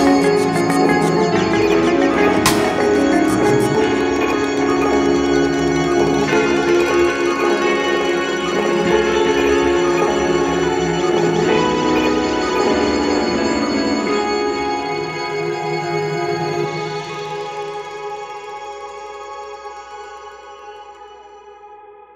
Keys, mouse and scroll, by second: 6.7 ctrl+z, 7.4 ctrl+z, 9.3 click.